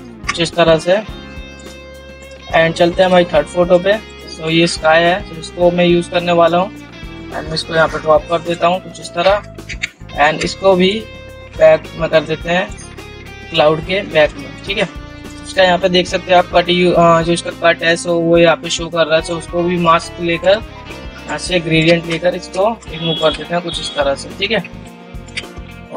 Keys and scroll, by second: 21.3 ctrl+shift+r.